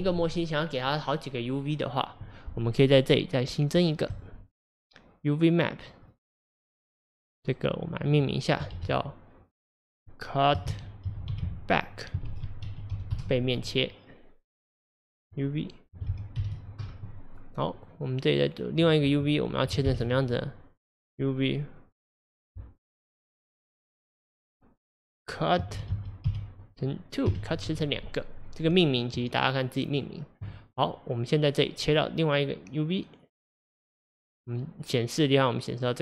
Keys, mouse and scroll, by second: 4.2-5.8 drag, 7.3-13.1 drag, 14.7-17.8 drag, 17.9-29.8 drag, 31.8 click, 33.9-36.0 drag.